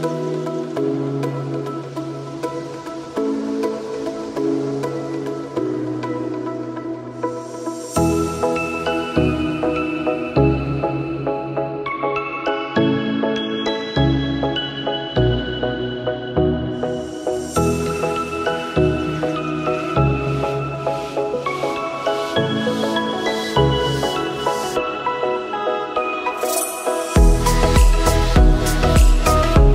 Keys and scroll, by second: 18.7 r, 20.9 F9.